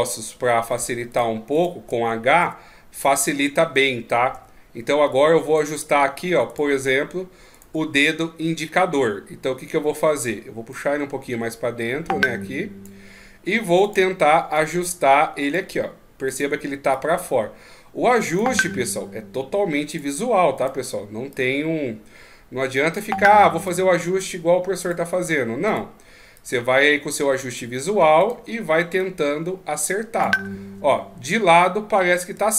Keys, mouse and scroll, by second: 2.4 h, 3.2 middle click, 4.3 KP_1, 5.6 right click, 6.5 shift+right click, 10.7 click, 13.8 right click, 14.5 click, 16.3 right click, 16.9 click, 20.6 right click, 21.3 click, 23.7 click, 25.7 right click, 26.3 click, 28.2 right click, 29.0 click, 32.2 KP_1.